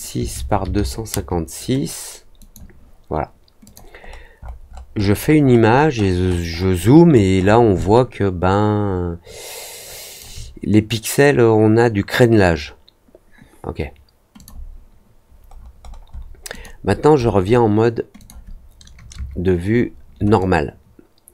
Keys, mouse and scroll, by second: 2.3 click, 3.6 click, 3.9-5.1 scroll down 4, 5.4-7.5 scroll up 7, 7.7-10.1 alt+drag, 14.3 click, 15.5 middle click, 15.8 middle click, 16.0 scroll down 1, 16.5 click, 16.8-17.3 scroll down 2, 18.1 click, 20.3-21.3 alt+drag.